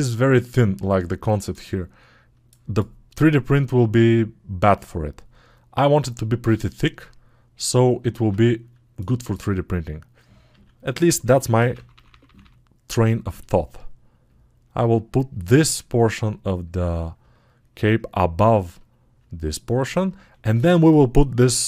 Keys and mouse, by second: 8.2-17.7 drag.